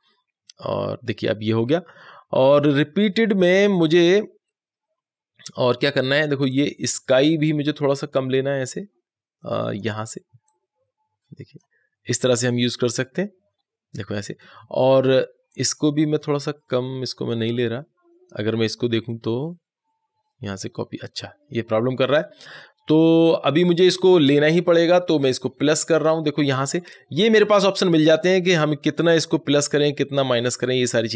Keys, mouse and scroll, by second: 6.4-15.4 drag, 15.4 click, 25.8-31.1 drag.